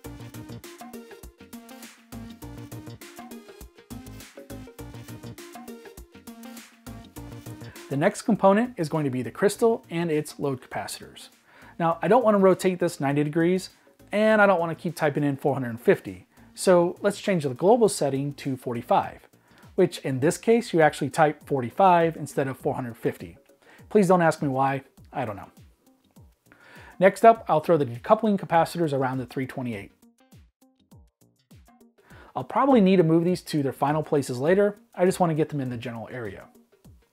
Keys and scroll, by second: 0.0-0.5 typing, 2.2 e, 3.4 typing, 11.4 m, 14.2 r, 14.7 r, 15.3 r, 15.5 r, 20.4-22.0 typing, 26.4 m, 27.0 r, 28.2 typing, 29.7 m, 30.0 r, 33.3 m, 33.6 r, 35.6 m, 35.9 r.